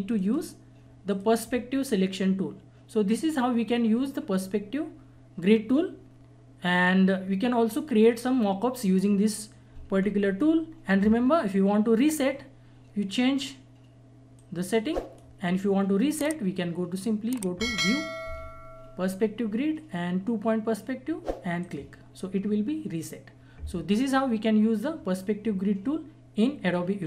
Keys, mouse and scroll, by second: 0.1 right click, 1.1 click, 2.9 click, 9.9 scroll down 1, 10.4 scroll up 1, 14.3-17.7 drag, 18.9 click, 21.6 click.